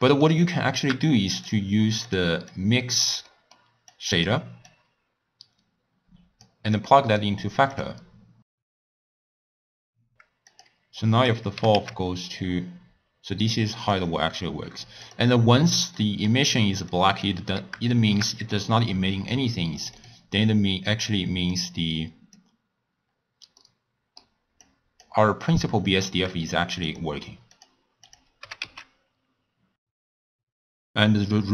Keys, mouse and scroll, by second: 2.4 click, 3.8 click, 6.3-6.8 drag, 8.8 click, 9.2 middle click, 9.2 scroll down 3, 9.4-9.8 shift+middle drag, 9.8-10.6 scroll down 2, 10.6 click, 11.2 click, 11.5 g, 14.3-15.0 scroll up 1, 15.0 scroll up 3, 15.1 click, 16.8 click, 17.8-19.8 shift+middle drag, 19.8 click, 25.3-26.4 drag, 27.5 click, 28.4 g, 30.6 click.